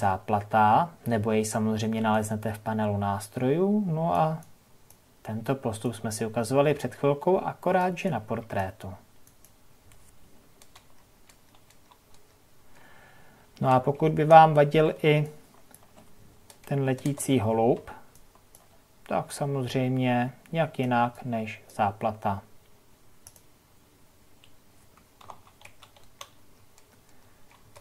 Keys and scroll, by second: 0.7 j, 10.7 ctrl+KP_Subtract.